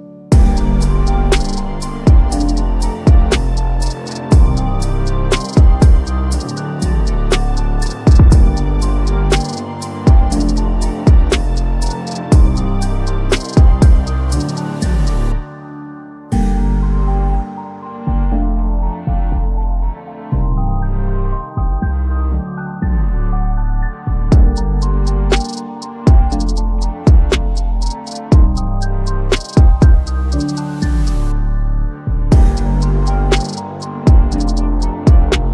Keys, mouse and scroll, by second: 0.1 ctrl+d, 1.5-3.2 drag, 4.4-5.1 drag, 6.3 s, 7.3-10.5 drag, 12.2 typing, 12.6-14.6 drag, 15.4 ctrl+z, 16.3 click, 18.2-19.4 drag, 23.2-24.1 drag, 25.8 Left, 28.1 Down, 30.2 Left, 31.7 Down, 32.3 Left, 32.9 Down.